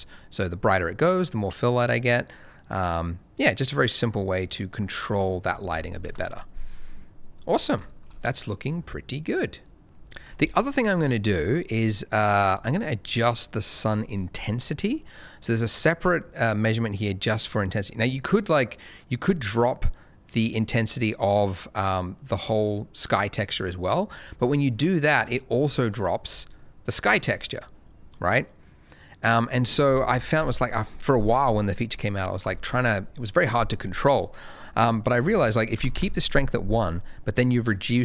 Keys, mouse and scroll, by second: 1.7 click, 5.6 shift+middle click, 6.0 0, 7.8 shift+middle click, 8.0 shift+scroll up 1, 11.1 shift+middle click, 12.4 click, 18.0 click, 25.5 shift+middle click, 25.7 shift+middle click, 26.2 middle click, 28.1 click, 29.4 right click, 30.3 KP_0, 31.9 shift+middle click, 35.1 click, 35.7 1, 35.9 Return, 36.1 1, 37.3 click.